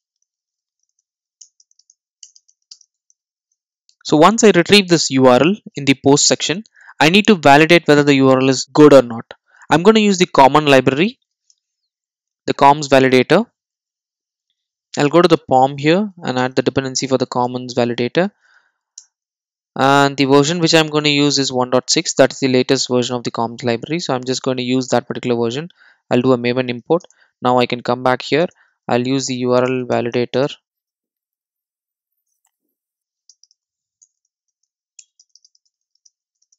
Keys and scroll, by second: 9.6 super+e, 16.4 Return, 26.9 super+e, 30.8 Return, 31.1 super+z, 32.9 Return.